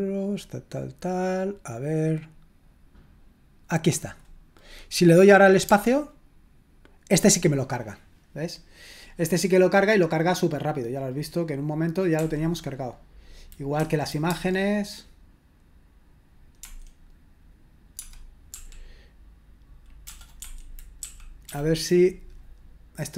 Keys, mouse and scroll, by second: 4.0 click, 12.2 Escape, 13.8 Right, 14.2 typing, 16.6 Escape, 18.5 l, 20.0 BackSpace, 20.4 Escape, 21.0 Right, 21.4 Right.